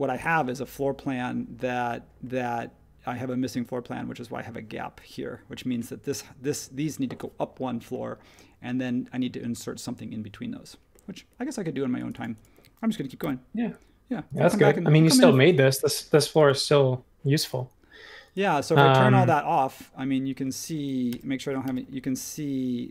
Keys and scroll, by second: 13.2 r, 15.7 space, 21.1 n, 21.6 n.